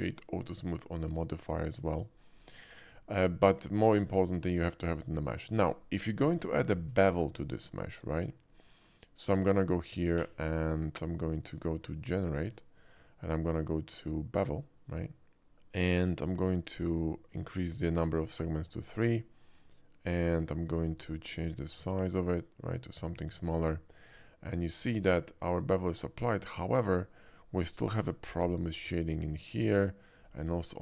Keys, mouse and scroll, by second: 0.3 click, 3.6 click, 4.3 shift+middle click, 5.5 shift+middle drag, 6.3 shift+middle drag, 7.1 shift+middle click, 11.3 click, 14.8 click, 18.0 click, 18.4 click, 21.0-24.0 shift+drag, 24.8-27.2 shift+middle drag, 27.9 shift+middle click, 28.3 shift+middle click, 28.5 shift+middle click, 30.0 shift+middle drag, 30.3 shift+middle click.